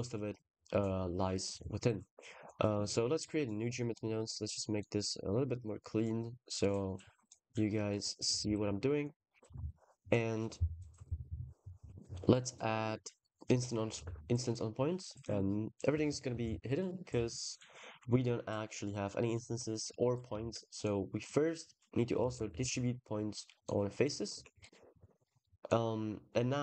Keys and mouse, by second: 1.2-2.5 shift+middle drag, 2.6-4.7 middle drag, 4.8 middle click, 6.6 click, 8.3 ctrl+s, 9.4 shift+a, 13.9 ctrl+s, 20.2 shift+a, 23.8 click, 24.2 ctrl+s, 25.0 click.